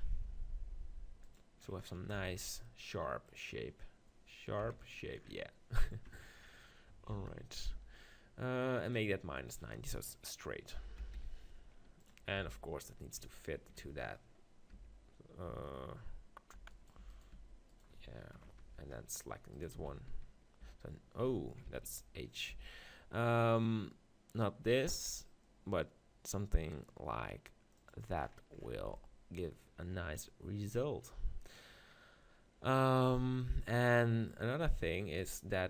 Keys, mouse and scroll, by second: 0.0 g, 1.6 click, 2.2 z, 2.3 click, 3.3 g, 4.6 KP_7, 7.1 shift+d, 7.7 r, 10.1-12.4 drag, 12.4 g, 14.7 Tab, 15.5 Tab, 16.6 Tab, 16.7-19.5 middle drag, 17.1 Tab, 17.3 Tab, 18.6 Tab, 19.8-21.4 right drag, 19.8 z, 21.1 h, 21.4 middle click, 21.7 ctrl+z, 22.5 g, 27.9-29.6 drag, 28.8 z, 29.6 middle click, 33.7 click, 34.3-35.6 middle drag, 34.8 click.